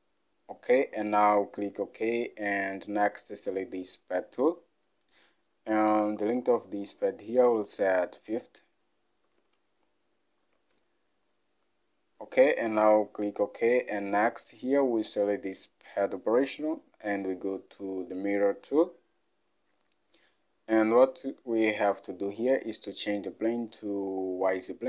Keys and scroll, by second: 0.0-0.1 typing, 3.8-4.5 typing, 6.5 alt+Tab, 10.5 typing, 16.2-16.9 typing.